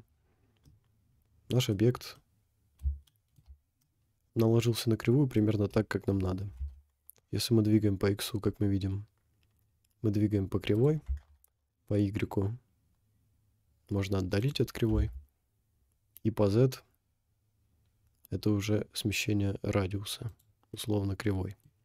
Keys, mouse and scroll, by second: 0.0-0.4 scroll down 5, 0.7-1.7 middle drag, 1.8-2.1 scroll up 4, 2.2-2.9 middle drag, 3.1-3.5 shift+middle drag, 3.5 scroll up 2, 3.9 middle click, 4.9 middle click, 5.0 middle click, 5.4 scroll down 3, 6.6 g, 11.0 g, 15.0 g, 20.9-21.6 middle drag.